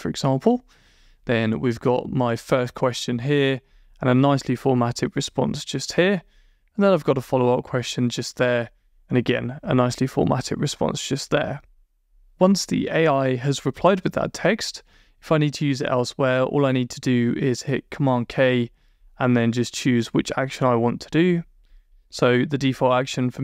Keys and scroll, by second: 19.8 Down.